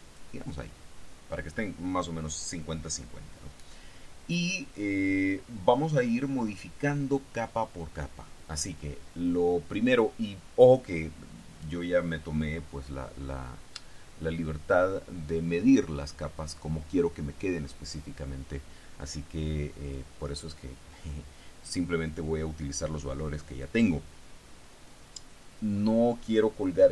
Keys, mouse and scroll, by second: 20.0 click, 23.7 click.